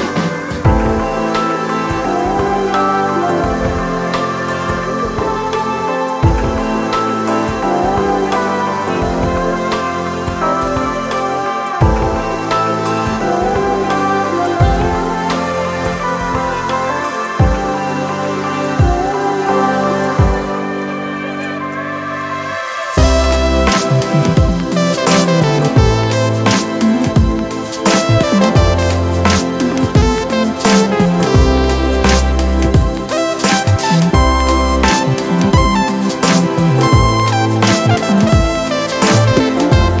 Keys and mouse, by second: 2.2 click, 4.5 click, 5.5 click, 7.3-11.5 drag, 11.5-17.1 drag, 17.1 click, 23.1 click, 26.0 click, 30.2 click, 35.2-40.0 drag.